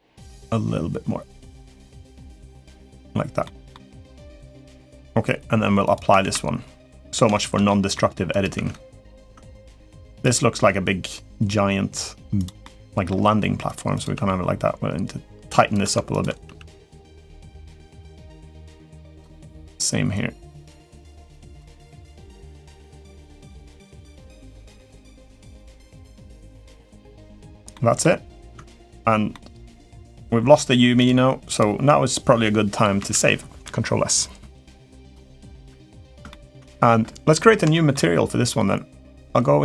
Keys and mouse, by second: 0.2-2.8 drag, 3.2 middle click, 4.0 click, 5.6 click, 6.0 ctrl+a, 7.1 shift+middle drag, 7.4 middle drag, 8.1 click, 8.3 Tab, 9.0-10.0 drag, 10.0 g, 12.4 middle click, 13.1 g, 13.7 click, 13.9 g, 15.9 shift+click, 16.2 g, 18.2 middle click, 19.1 middle click, 19.6 g, 21.9 g, 22.7 middle click, 23.6 click, 23.7 g, 24.5 click, 24.8 g, 27.1 middle click, 27.5 middle click, 28.3 Tab, 29.1-30.3 middle drag, 31.3-32.0 drag, 32.9 ctrl+s, 35.4-35.7 middle drag, 36.0 shift+middle drag, 36.4 middle drag, 37.5 shift+middle drag.